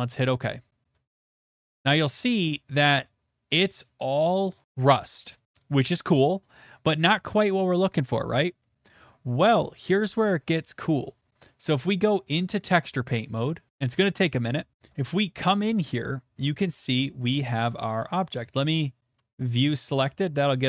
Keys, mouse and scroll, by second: 0.3 click, 2.8 click, 5.4 middle click, 5.5 shift+middle click, 8.0 click, 11.4 click, 12.6 click, 14.9-16.1 shift+middle drag, 17.0 shift+middle click, 17.2 middle click.